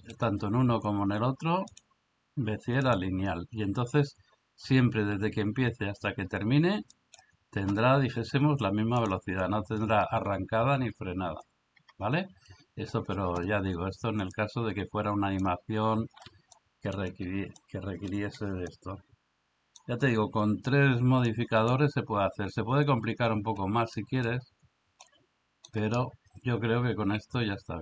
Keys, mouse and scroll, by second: 1.8-3.0 drag, 7.0 click, 11.8 Escape, 14.5-15.5 drag, 16.5-16.9 middle drag, 17.6 middle click, 18.7-19.8 middle drag, 21.3 click, 24.0 middle click, 25.1 middle click.